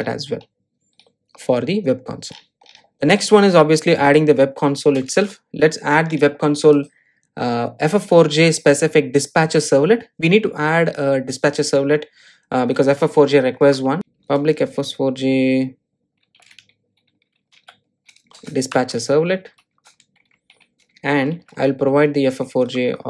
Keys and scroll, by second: 14.0 Return, 18.8 Return.